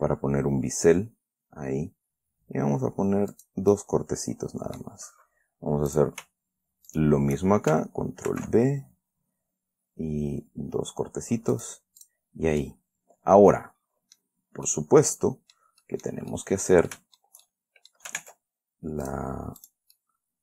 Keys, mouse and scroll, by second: 2.6 scroll up 2, 3.1 scroll up 2, 3.7 click, 4.1-5.3 middle drag, 6.3 right click, 7.2 shift+right click, 7.3 shift+click, 8.6 ctrl+b, 10.9-11.5 scroll up 4, 11.9 click, 12.4 click, 13.0-14.7 drag, 14.7-15.0 scroll down 1, 15.0-16.1 drag, 16.2 click, 16.7 click, 17.2 click, 17.3-18.4 shift+middle drag, 18.5 ctrl+Tab, 19.4 click, 20.0 click, 20.3-20.4 middle drag.